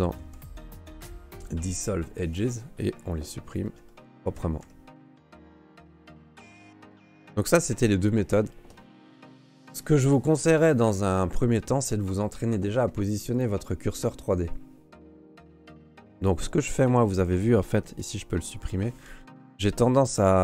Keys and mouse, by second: 0.2 Delete, 3.6 shift+middle click, 3.9 middle click, 4.3 ctrl+s, 4.6 Tab, 5.2 q, 6.3 ctrl+s, 6.5-7.6 middle drag, 9.0 shift+middle click, 11.5 Tab, 12.7 ctrl+Tab, 15.2 click, 15.2 right click, 16.8 right click, 17.1 right click, 17.8 Delete, 19.9 right click.